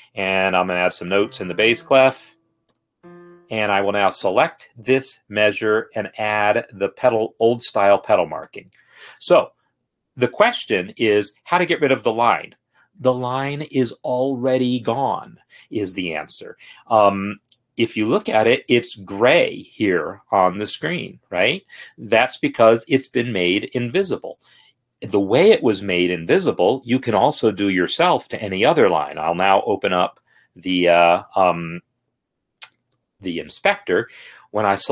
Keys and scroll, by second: 0.8-1.4 typing, 3.1 typing, 3.8 Escape, 30.4 F8.